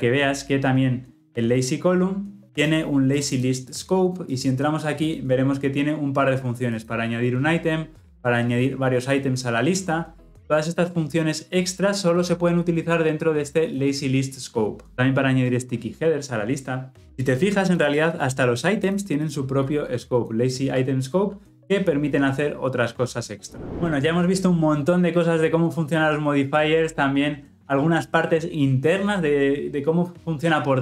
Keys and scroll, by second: 4.3 ctrl+b, 20.3 ctrl+b.